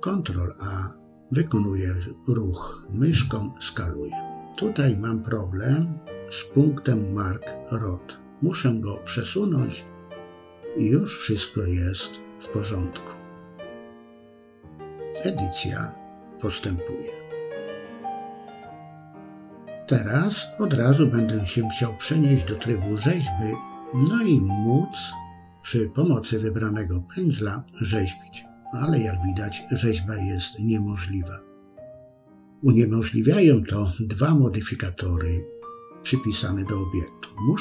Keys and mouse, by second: 1.0 middle click, 2.1 click, 2.7 ctrl+a, 5.1 click, 6.6 click, 7.8 ctrl+a, 9.2 KP_3, 10.3 click, 10.7 shift+click, 11.1 right click, 12.4 ctrl+a, 14.5 middle click, 16.0 KP_1, 17.7 KP_3, 19.1 Tab, 24.9 click, 26.1 click, 26.7 click, 27.4 click, 28.0 click, 33.4 Tab.